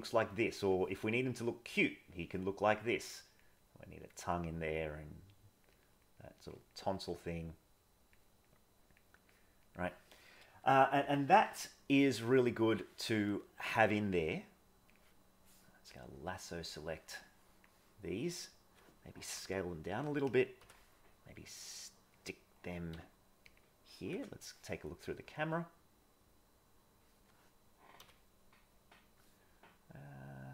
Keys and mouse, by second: 0.2 click, 1.2 click, 1.7 click, 2.0 click, 2.8 click, 3.7 click, 4.7 click, 5.8 click, 6.1 click, 6.3 click, 6.6 click, 7.0 click, 7.8 click, 8.2 click, 8.6 click, 9.1 click, 11.0 middle click, 12.4 middle click, 13.7-14.9 drag, 16.0-17.6 drag, 20.6 g, 22.9 s, 24.1 KP_0, 24.9-27.0 middle drag, 27.9 g.